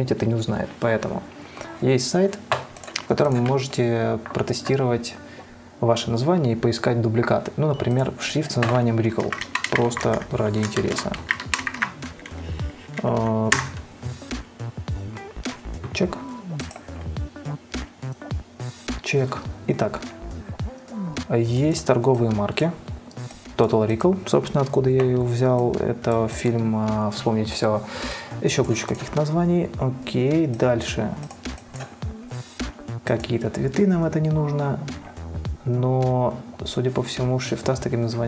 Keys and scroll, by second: 9.2-12.4 typing, 13.8 Return.